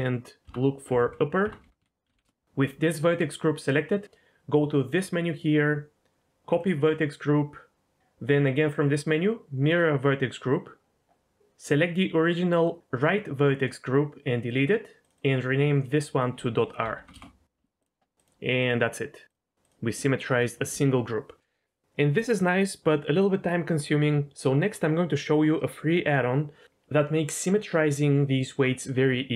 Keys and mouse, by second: 1.0 p, 4.9-6.7 drag, 8.4-9.8 drag, 15.0-17.1 drag, 18.6 ctrl+click, 19.3 ctrl+click.